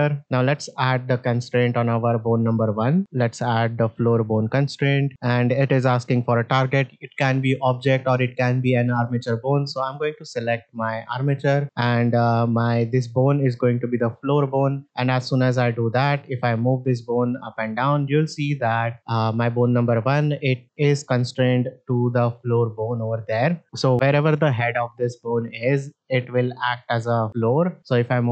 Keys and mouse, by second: 0.5 middle click, 2.9-3.9 drag, 4.7 shift+middle drag, 9.3 click, 11.6 click, 13.8 middle drag, 14.3 shift+middle drag, 14.8 middle click, 15.8-21.8 drag, 23.6 middle click, 23.9 middle click, 26.8 middle drag, 28.1-28.3 drag.